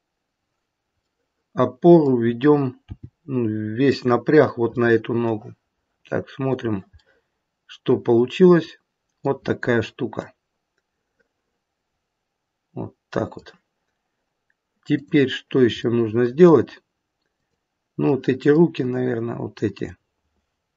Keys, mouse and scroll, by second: 1.0 middle click, 2.8 g, 4.7 middle click, 6.5 click, 7.0 middle click, 8.2 middle click, 8.9 middle click, 10.3 middle click, 15.0 click, 15.9 middle click, 17.3 click, 18.1 middle click, 19.7 click.